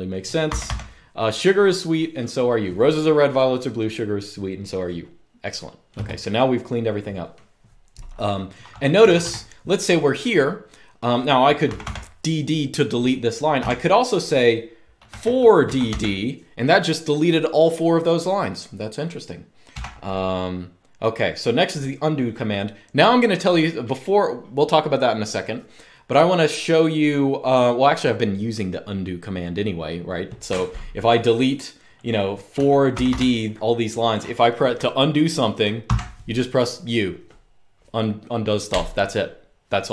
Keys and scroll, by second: 0.2 typing, 8.7 typing, 11.4 typing, 13.3 typing, 14.8-15.6 typing, 19.4 u, 32.0-33.3 typing, 35.5 u.